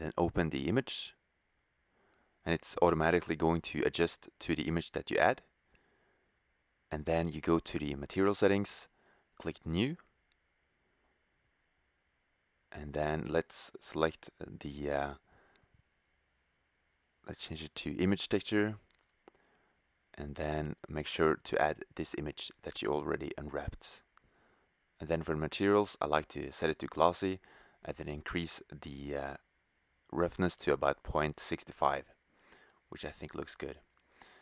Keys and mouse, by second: 1.1 click, 1.5-7.7 middle drag, 7.7-9.6 drag, 9.6-10.8 middle drag, 10.8-15.3 drag, 15.3-16.3 middle drag, 16.3-17.9 drag, 19.9-21.6 drag, 32.5 shift+z.